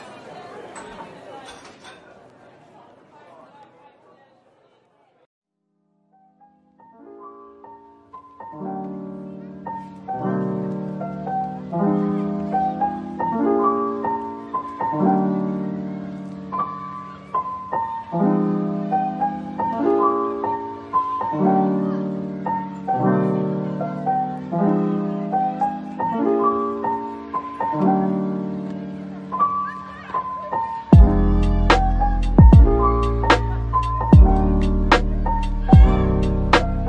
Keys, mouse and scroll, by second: 0.8 typing, 2.6 typing, 4.8 shift+click, 5.5 ctrl+l, 6.3 g, 8.7 double click, 9.7 shift+l, 10.7 shift+l, 11.5 ctrl+l, 11.8 g, 13.2 click, 13.7 shift+click, 15.0 ctrl+l, 15.7-16.2 typing, 18.8 middle click, 20.7 ctrl+l, 21.4-22.4 typing, 23.0 middle click, 24.7 shift+click, 25.0 shift+double click, 25.4 shift+click, 26.0 ctrl+l, 26.7 g, 28.0 click, 28.6 shift+click, 29.3 l, 30.3 ctrl+l, 30.9 typing, 31.8 double click, 32.1 middle click, 33.3 typing, 34.8 typing, 36.3 typing.